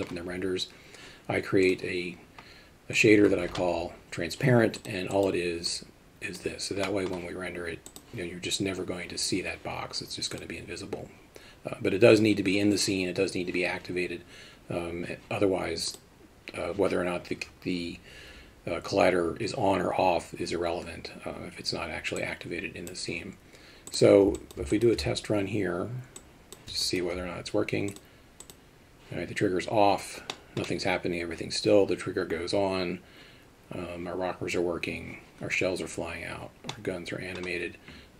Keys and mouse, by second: 1.6 click, 5.1 click, 5.8 click, 6.8 middle click, 10.3 click, 16.0-22.9 drag, 24.4 alt+middle click, 24.7 alt+shift+middle drag, 26.2 click, 26.9 alt+shift+middle drag, 28.0 click, 28.4 click, 30.3 middle drag, 36.7 middle click.